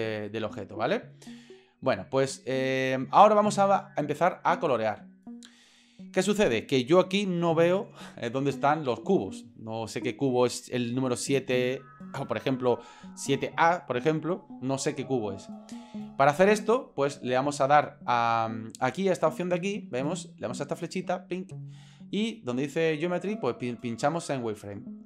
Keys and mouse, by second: 21.1-25.0 drag.